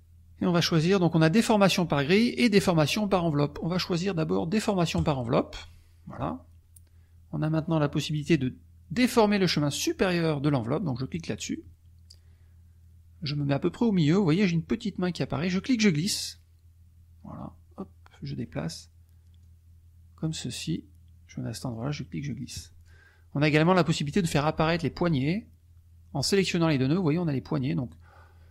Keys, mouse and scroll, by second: 5.0 click, 11.1 click, 15.5-18.5 drag, 19.5 click, 21.7-23.0 drag, 23.5 click, 24.1-25.4 drag, 26.2 click, 27.8-28.5 drag.